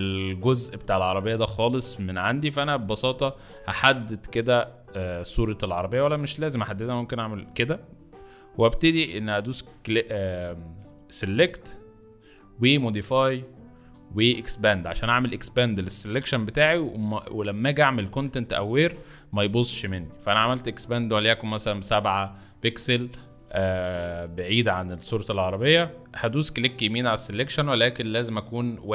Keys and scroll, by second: 0.8 m, 2.5 space, 5.2 ctrl+z, 17.8 7, 18.1 Return, 24.2 z.